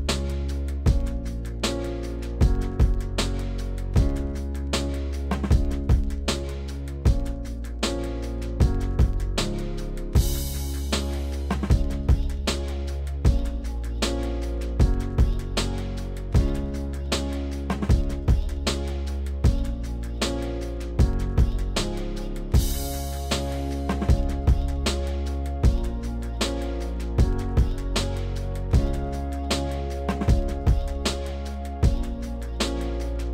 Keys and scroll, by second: 4.0 s, 5.6 s, 28.5 2.